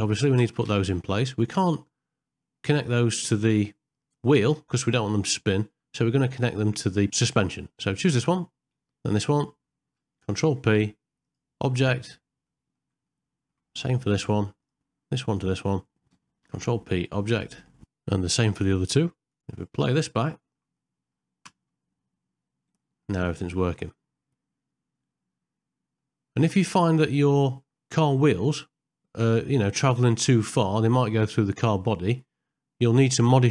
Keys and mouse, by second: 0.4 space, 0.8 shift+Left, 2.5 shift+middle click, 3.1-4.5 middle drag, 5.1 ctrl+middle click, 6.1 shift+middle click, 8.0 click, 9.0 shift+click, 10.2 ctrl+p, 12.5 ctrl+middle click, 13.1 shift+middle click, 14.6 click, 15.3 shift+click, 17.8 shift+middle click, 18.3 shift+click, 18.4 ctrl+p, 18.8 shift+middle click, 19.2 ctrl+p, 19.4 middle click, 20.4 shift+middle click, 20.8 middle click, 21.5 space, 22.9 middle click, 23.4 middle click, 24.0-26.0 middle drag, 26.7 ctrl+middle click, 28.4-31.0 middle drag, 32.1 ctrl+middle click.